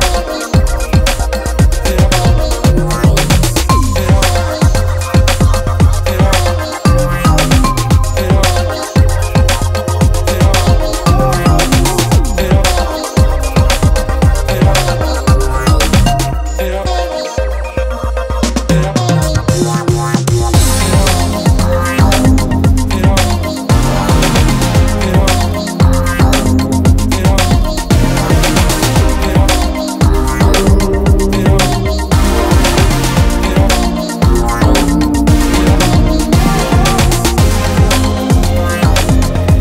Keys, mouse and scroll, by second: 4.1 KP_7, 5.7 shift+a, 8.1 shift+a, 9.7 s, 11.1 KP_3, 20.7 KP_0.